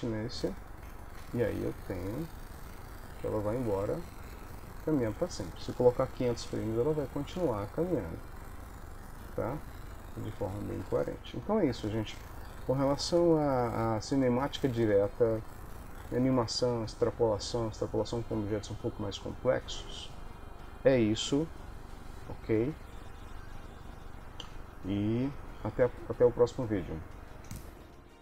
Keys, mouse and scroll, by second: 1.1 space, 3.9 ctrl+middle click, 4.4 middle click, 7.2 middle click, 11.0 Escape, 12.3 ctrl+s, 12.3 middle click, 13.7 KP_1, 14.4 KP_3, 15.5 shift+middle click, 16.8 ctrl+s.